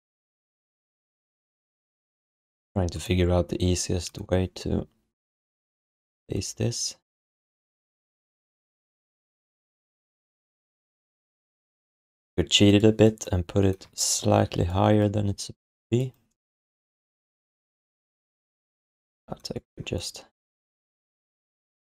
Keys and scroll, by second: 14.0 ctrl+z.